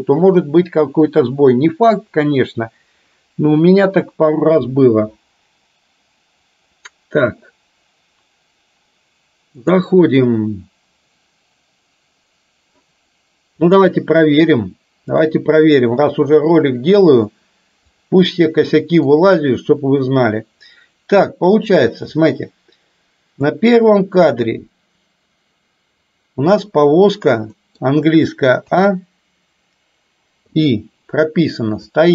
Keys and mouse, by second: 9.6 click, 13.6 click, 15.2-18.1 drag, 18.8 middle click, 21.8 click, 23.6-26.7 drag, 27.6 middle click, 28.7 a, 30.6 i, 32.0-32.1 drag.